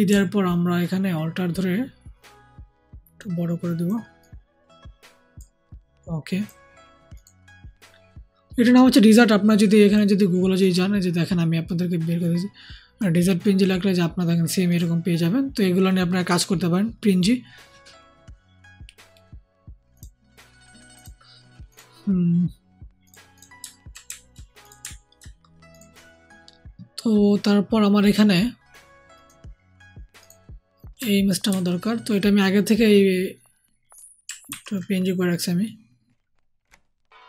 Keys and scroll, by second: 31.4 ctrl+c, 34.4 ctrl+v.